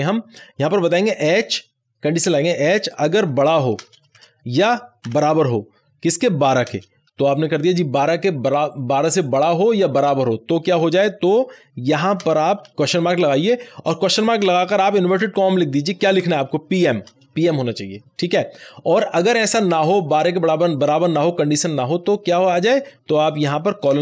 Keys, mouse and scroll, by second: 0.9 h, 3.7 h, 3.8 space, 4.1 shift+=, 5.0 =, 6.6 space, 12.1 space, 12.7 shift+/, 14.3-15.2 typing, 16.3 shift+p, 16.7 shift+m, 21.7 shift+m, 21.7-23.1 drag, 23.9 space.